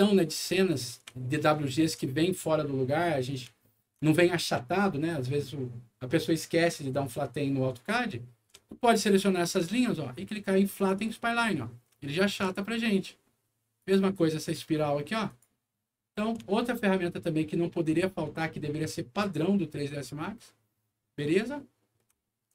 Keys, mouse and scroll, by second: 0.6 click, 1.2 alt+middle click, 2.6 alt+middle click, 3.6 alt+middle click, 4.2 alt+middle click, 8.0 middle click, 8.6-12.3 alt+middle drag, 10.7 alt+click, 13.7 alt+click, 15.2 alt+click, 16.4-17.8 alt+middle drag, 20.9 middle click, 22.1 alt+middle click.